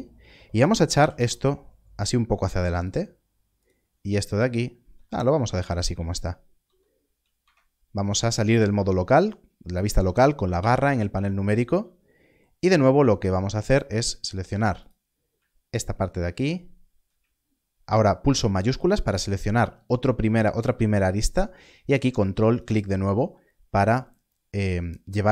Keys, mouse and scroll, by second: 0.8 g, 1.1 y, 2.7 click, 6.5 alt+a, 7.4 Tab, 10.5 KP_Divide, 12.5 Tab, 14.8 click, 15.7 ctrl+click, 18.7 shift+click, 22.5 ctrl+click.